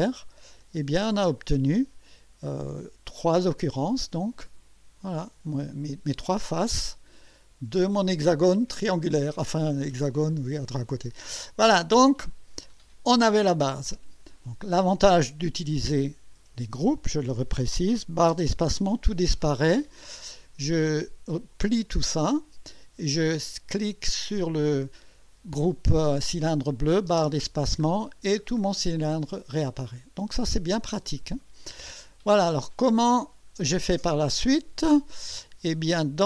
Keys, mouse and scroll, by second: 0.6 space, 1.5-3.1 drag, 3.2-3.7 drag, 4.2 click, 4.8-5.1 scroll up 1, 6.9-13.3 drag, 13.9 scroll up 2, 17.0 click, 18.3 space, 21.5 click, 24.3 click, 27.1 space, 27.9-28.8 scroll down 5, 29.5-30.5 drag, 30.8 scroll up 1, 31.4-32.0 right drag, 32.1-32.4 scroll up 1, 32.6-33.2 right drag, 33.3 scroll down 1.